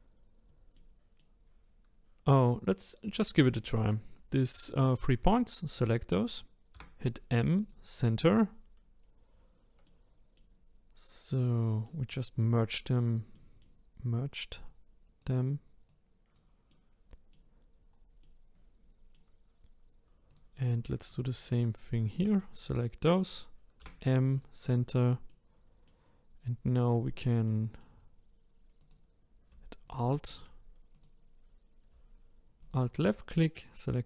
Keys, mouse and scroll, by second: 0.7-2.3 middle drag, 2.3-3.5 scroll up 3, 3.5-6.5 shift+middle drag, 6.7 m, 9.8-14.6 middle drag, 14.6 click, 15.9 click, 16.7-17.7 middle drag, 17.7 scroll down 2, 18.2-20.3 middle drag, 20.3 click, 20.8 click, 21.4 shift+click, 22.0 shift+click, 22.4-23.8 middle drag, 23.8 m, 25.3-27.0 middle drag, 27.0 click, 27.4-28.8 middle drag, 28.8 click, 29.8 alt+click, 30.9 click, 31.4-32.6 scroll up 1, 32.6 alt+click.